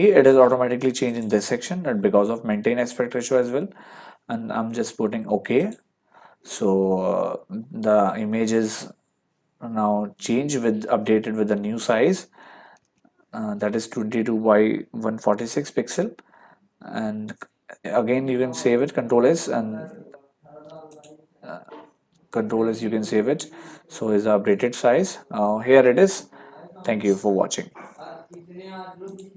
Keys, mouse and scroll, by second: 1.1 click, 5.6 click, 12.9 ctrl+1, 17.0 ctrl+1, 18.6 ctrl+s, 20.5 Escape, 20.9 click, 23.0 ctrl+s, 29.1 click.